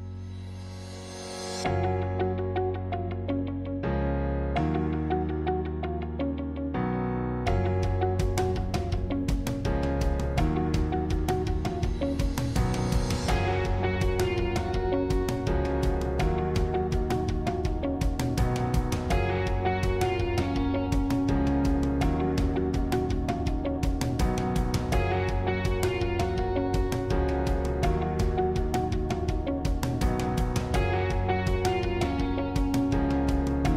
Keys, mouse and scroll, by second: 1.7 shift+click, 2.3-4.3 middle drag, 4.3 shift+click, 4.8-7.8 middle drag, 7.8 shift+click, 8.3 middle click, 9.0-10.1 scroll up 1, 10.1 scroll up 1, 10.8-14.2 shift+middle drag, 17.5 middle click, 18.4-18.8 scroll down 3, 18.8-22.2 middle drag, 22.2 click, 23.1 s, 28.0 g, 30.0 click, 30.5-33.2 middle drag, 33.2 alt+shift+click.